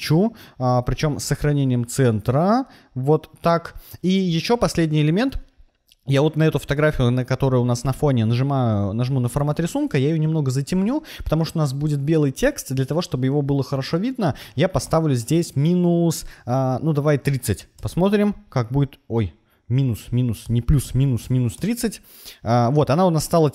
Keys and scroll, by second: 14.8 BackSpace, 17.0 3, 17.4 0, 17.7 Return, 20.0-21.6 typing.